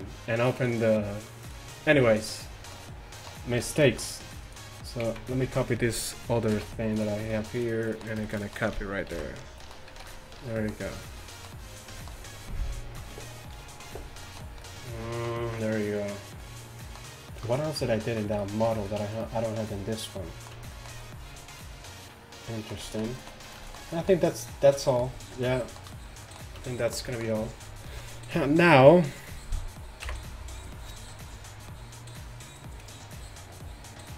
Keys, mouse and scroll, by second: 7.9 middle click, 9.2 ctrl+v, 10.0 a, 10.6 middle click, 11.3 middle click, 14.2-15.3 middle drag, 16.1-17.2 middle drag, 30.1 KP_1.